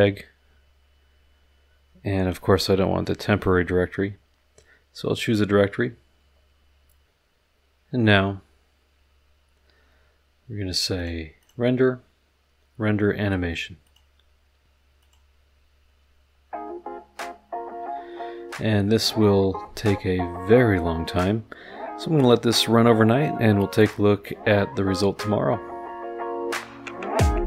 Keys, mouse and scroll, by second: 3.3 click, 11.0 click, 11.4 click, 13.8 click, 15.0 click, 16.8-17.2 scroll down 2, 17.5-17.9 scroll up 1, 18.5 scroll up 1.